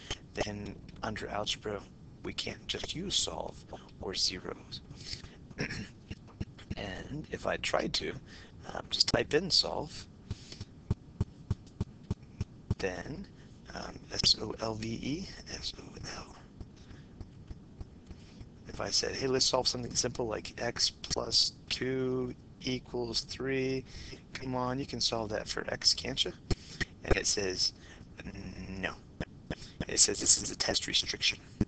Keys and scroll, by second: 0.2 Menu, 0.9 Down, 1.1 Down, 18.9-19.6 typing.